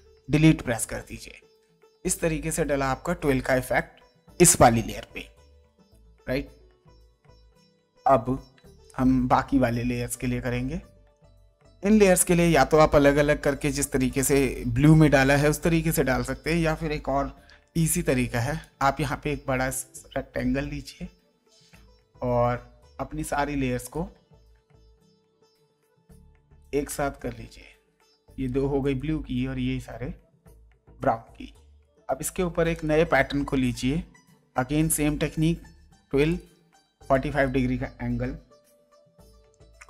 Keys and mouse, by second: 0.2 Delete, 1.4 ctrl+d, 8.5 space, 8.8 click, 17.4 m, 18.6 click, 23.8 click, 25.7 click, 28.3 click, 31.8 click, 34.2 click, 36.3 click, 38.6 KP_4, 38.9 KP_5, 39.4 Return.